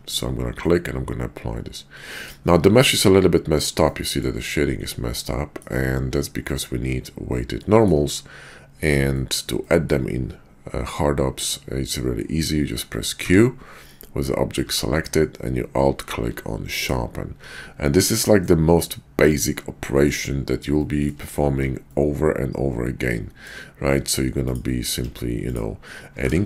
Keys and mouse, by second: 0.6-2.3 middle drag, 3.8-4.2 middle drag, 4.9-5.6 drag, 6.5 middle click, 7.6 middle drag, 9.1-9.4 shift+middle drag, 9.6-9.9 middle drag, 13.1 q, 14.6 q, 18.5-20.1 drag, 20.9 shift+middle click, 22.0-23.5 middle drag, 24.4 click, 24.9 x, 26.2 shift+a.